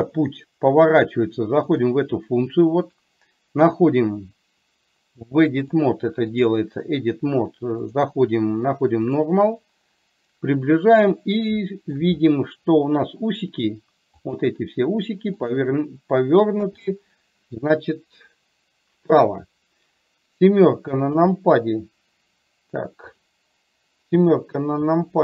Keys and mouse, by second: 1.8-4.5 drag, 5.7-6.7 drag, 8.1 click, 11.7 shift+middle click, 14.3 click, 15.4 click, 21.2 KP_7.